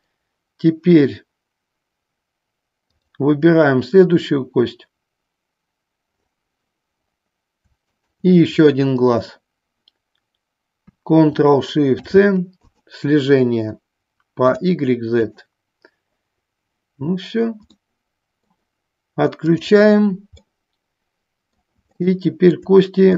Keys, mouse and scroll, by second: 2.9-5.7 drag, 8.1-10.4 shift+drag, 12.0 ctrl+shift+c, 14.7 click, 15.3 click, 17.9 middle click, 19.5 click, 20.5-21.8 middle drag, 22.0 shift+middle click.